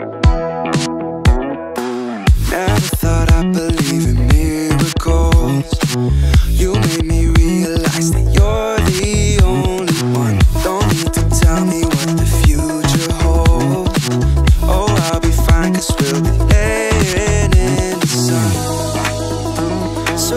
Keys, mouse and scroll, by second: 0.0-0.4 scroll up 3, 1.2-2.1 drag, 2.5-2.9 scroll up 1, 3.0 click, 3.8 x, 5.0 click, 5.8-6.5 scroll down 1, 6.7 g, 7.3 x, 8.5 ctrl+click, 9.4 click, 9.7-10.1 scroll down 2, 10.1 shift+middle click, 10.6-11.0 scroll up 1, 11.4 g, 14.7 click, 16.3-16.7 scroll up 2, 16.7 shift+middle click, 17.1-17.5 scroll up 1, 18.4 e.